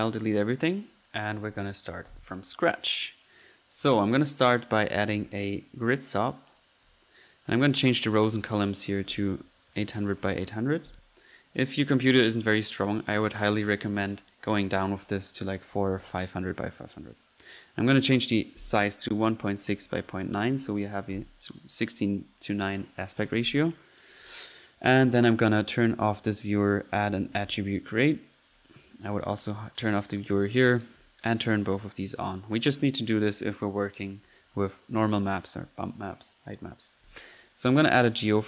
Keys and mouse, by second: 2.2 Delete, 4.3-5.7 typing, 4.6 click, 5.7 drag, 6.9 click, 7.8 click, 12.0 click, 17.5 click, 26.0 drag, 26.6 right click, 26.9-27.7 typing, 28.1 click, 29.2-29.6 drag, 29.8-30.3 drag, 31.0-31.7 drag, 32.6 click, 32.7 right click, 33.1 drag, 34.1-34.5 drag, 34.7 click, 37.9 right click, 37.9-38.4 typing.